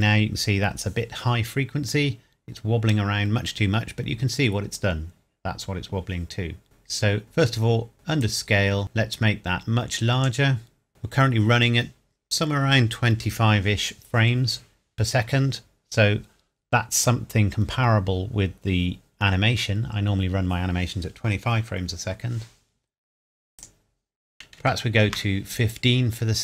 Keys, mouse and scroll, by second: 1.3 scroll up 1, 2.5 scroll down 1, 6.6 click, 8.2 click, 23.6 click, 24.4 KP_1, 24.6 KP_5, 25.0 KP_Enter.